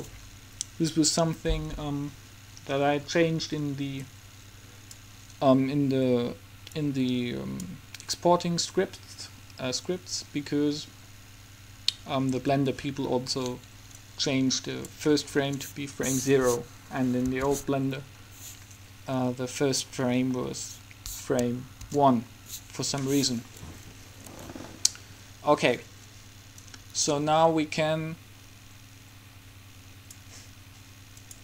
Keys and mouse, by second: 4.1 click, 4.9-5.9 drag, 6.9-8.6 drag, 11.3-14.2 middle drag, 14.2-15.4 drag, 15.4-17.5 middle drag, 17.5 KP_3, 18.4-20.4 middle drag, 22.1 KP_1, 26.8-28.5 drag.